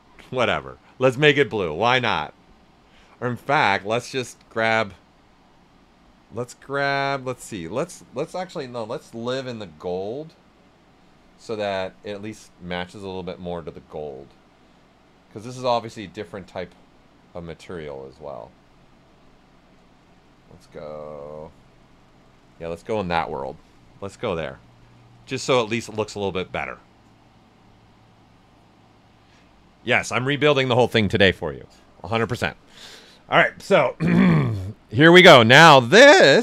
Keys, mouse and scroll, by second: 4.1-8.5 drag, 8.5-11.6 drag, 11.6-20.9 drag, 23.0-33.4 right drag, 33.8 alt+right click, 34.8 shift+f, 35.2-36.4 shift+right drag.